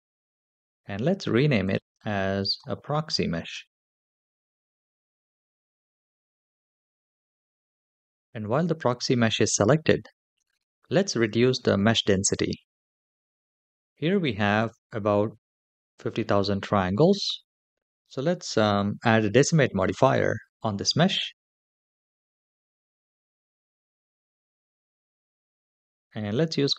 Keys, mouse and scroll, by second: 1.4 click, 1.6-6.0 drag, 3.5 BackSpace, 9.0 click, 19.7 click, 22.6-25.0 drag.